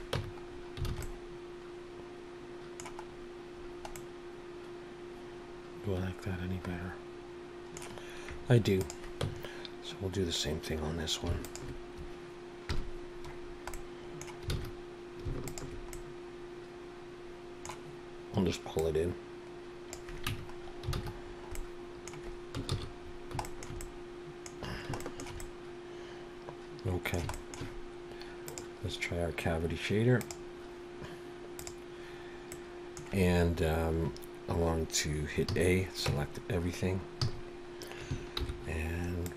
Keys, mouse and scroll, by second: 0.2 Tab, 0.4-0.9 scroll down 3, 0.9 alt+a, 1.0 middle click, 3.1-3.5 scroll up 1, 4.0 middle click, 8.8 click, 9.3 Tab, 11.4 alt+shift+click, 12.7 KP_Decimal, 13.4-13.8 scroll down 3, 13.8 middle click, 14.5 alt+a, 15.5 alt+shift+click, 15.9 middle click, 18.8 click, 20.3 Tab, 20.6-21.5 scroll down 6, 20.9 alt+a, 21.5 middle click, 22.8 ctrl+s, 23.0-23.5 scroll down 2, 23.5 shift+middle click, 23.8 middle click, 24.9 scroll down 1, 25.0 shift+middle click, 25.4 middle click, 27.3 shift+middle click, 28.5 click, 32.5 middle click, 33.5-33.9 scroll down 4, 35.5 a, 36.1 Tab, 37.2 a, 38.4 alt+n.